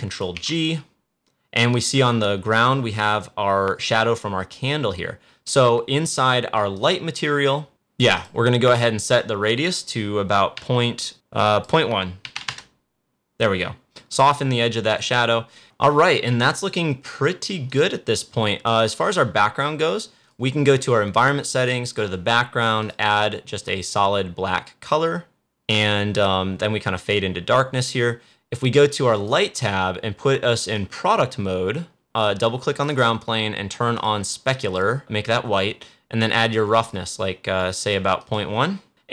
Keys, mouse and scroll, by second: 0.2 ctrl+g, 1.0 ctrl+g, 6.7 click, 11.3 click, 15.6 click, 16.4 click, 18.6-20.1 scroll up 1, 20.1-25.4 drag, 29.1 click, 32.7-38.1 drag.